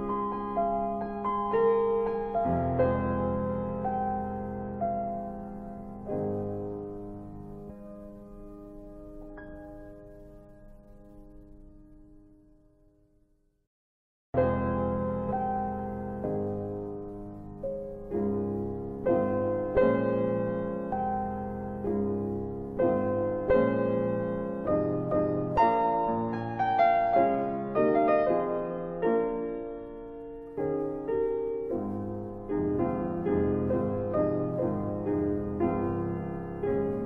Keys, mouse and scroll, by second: 1.0 click, 3.6 middle click, 4.2-5.0 scroll up 2, 6.4 click, 9.5 click, 13.5 click, 15.5 click, 17.4 click, 18.5 click, 20.4 click, 21.8 click, 23.0 click, 24.3 click, 25.9 click, 28.1 middle click, 29.1 alt+w, 29.6 alt+w, 30.2 alt+middle click, 34.0-34.9 scroll up 3, 35.1 alt+middle click, 35.9 alt+w.